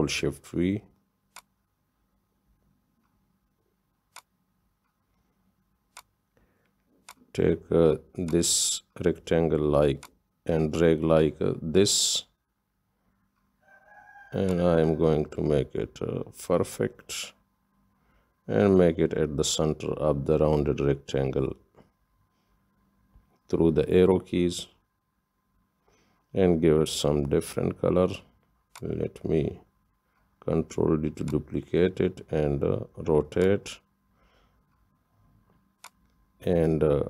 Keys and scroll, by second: 0.7 ctrl+shift+c, 3.1 ctrl+shift+v, 19.5 Down, 19.5 Down, 19.7 Down, 19.8 Down, 20.2 Down, 20.6 Down, 30.4 ctrl+d.